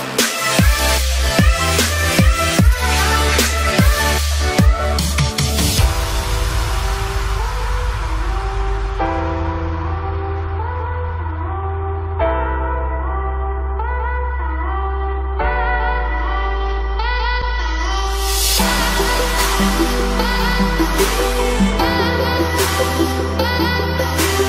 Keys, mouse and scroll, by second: 3.8 click, 5.5 ctrl+d, 8.1 shift+click, 12.1 ctrl+d, 13.8 ctrl+click, 14.7 right click, 16.0 click, 18.1-19.5 typing, 22.1 click.